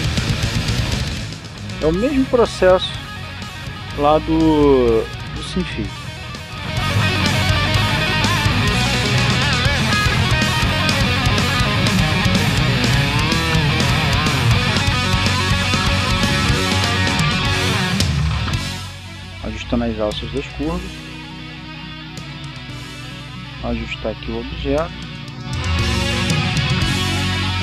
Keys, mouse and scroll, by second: 1.6 click, 2.3 right click, 2.6 g, 4.1 click, 4.6 right click, 4.8 g, 6.9 click, 7.7 right click, 7.9 g, 9.1 click, 10.2-11.2 scroll up 2, 11.2-11.8 scroll down 2, 12.4-13.0 scroll up 2, 13.5 right click, 13.7 g, 15.2 click, 15.9 right click, 16.2 g, 18.1 click, 18.8 right click, 19.0 g, 20.6 click, 22.0 right click, 22.3 g, 24.5 click, 25.4 right click, 25.6 g.